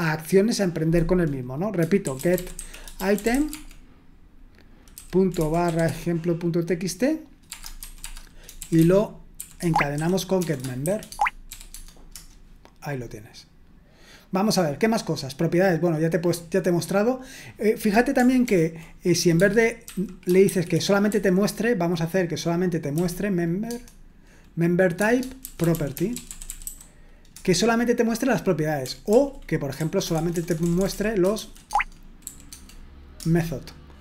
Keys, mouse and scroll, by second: 2.1-3.8 typing, 5.4-6.2 typing, 8.6-12.0 typing, 9.6 Tab, 12.1 Return, 14.0-15.7 scroll down 1, 16.1-17.1 scroll down 1, 17.5 click, 18.4 ctrl+p, 19.4-21.1 typing, 23.6 Tab, 25.4-27.8 typing, 29.1 ctrl+p, 29.8-32.2 typing, 31.7 Tab, 32.5 Tab, 33.2 Return.